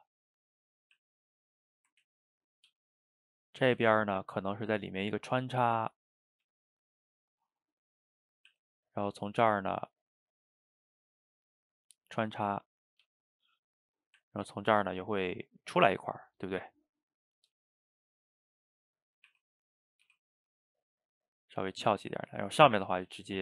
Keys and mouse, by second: 1.0 e, 1.6-2.1 middle drag, 2.1 ctrl+z, 2.7 g, 3.7-4.3 middle drag, 4.3 g, 4.8-5.5 middle drag, 5.5 g, 6.3 click, 6.5 g, 7.5 click, 7.6-8.5 middle drag, 8.5 e, 10.5-11.9 middle drag, 11.9 g, 12.9 click, 13.1 g, 14.0 click, 14.2 e, 15.1-17.4 middle drag, 17.4 g, 18.5 click, 18.7-19.3 middle drag, 19.3 r, 20.1 r, 21.1-22.9 middle drag, 22.9 click, 23.1 middle click.